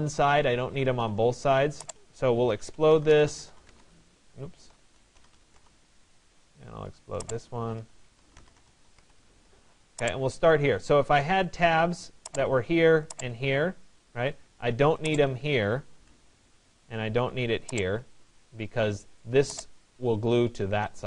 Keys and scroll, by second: 2.9 o, 3.5 d, 15.8 Delete.